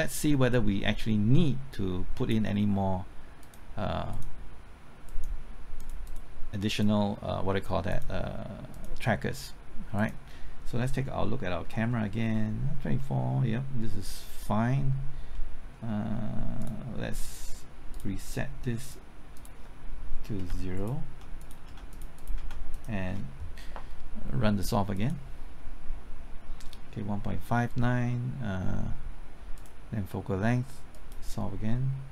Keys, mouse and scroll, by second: 10.8 middle click, 16.6 click, 20.4 KP_0, 20.7 click, 21.7 KP_0, 21.9 click, 22.4 KP_0, 22.7 click.